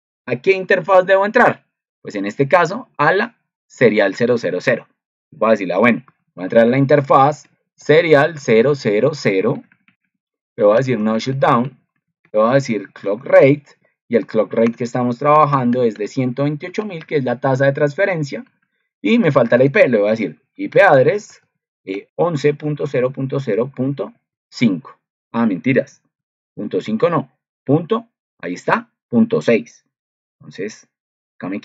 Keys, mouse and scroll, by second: 0.7 ctrl+2, 26.1 ctrl+2.